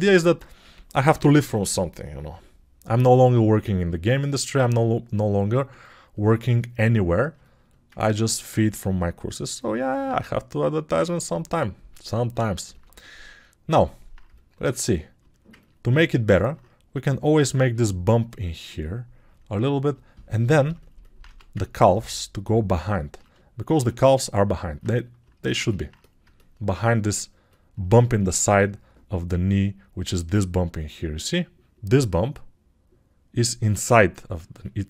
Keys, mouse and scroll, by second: 1.4 ].